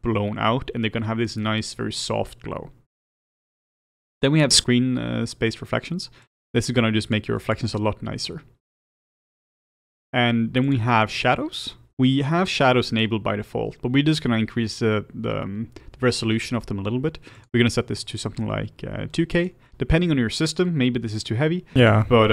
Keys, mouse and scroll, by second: 7.0 click, 7.4 click, 19.4-22.3 drag.